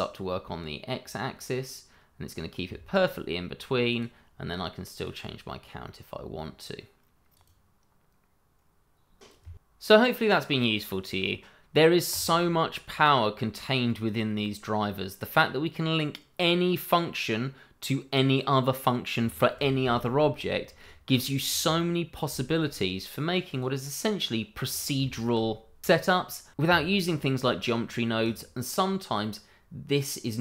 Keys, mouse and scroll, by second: 3.9 click, 12.1 click, 13.1 scroll down 1, 13.9 scroll up 1, 14.4 middle click, 20.7 middle click, 22.3 shift+middle click, 23.5 click, 24.0 scroll down 1, 25.0 shift+middle click, 28.2 click.